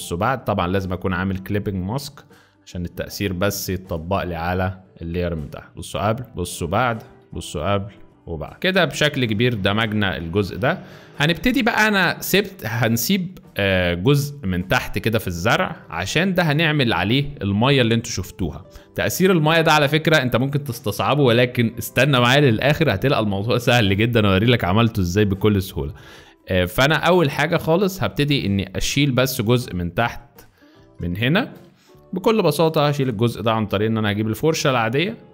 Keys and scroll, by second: 8.5 z, 9.2 space, 10.6 z, 12.9 space, 15.6 z, 29.6 z, 31.0 space, 31.7 z, 33.7 b.